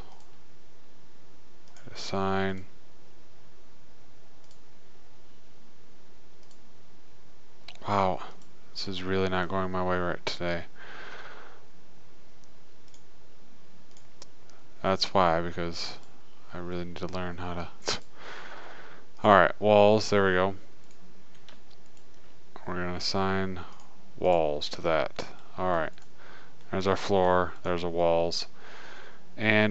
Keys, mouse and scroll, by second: 2.2 click, 3.9 click, 4.9-6.7 drag, 8.7-10.5 drag, 10.5 middle click, 11.1-13.2 middle drag, 13.2-16.2 drag, 16.2 middle click, 18.3-20.2 drag, 20.2-21.3 middle drag, 21.3-24.2 right drag, 24.2 click, 25.5-26.6 drag, 26.6 middle click, 27.3 click.